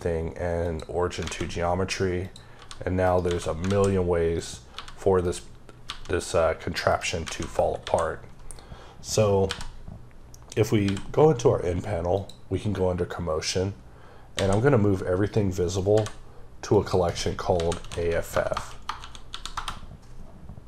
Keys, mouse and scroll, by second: 0.5 click, 1.1 a, 2.1 click, 2.4 g, 2.9 right click, 3.1 a, 3.2 scroll down 3, 4.2 click, 4.6 g, 5.1 right click, 5.7 g, 6.7 right click, 7.1 alt+a, 7.6 KP_7, 8.5-8.9 scroll up 2, 10.7 n, 12.0 click, 13.8-14.2 scroll down 2, 14.2 a, 16.6 click, 17.4-18.8 typing, 20.5 click.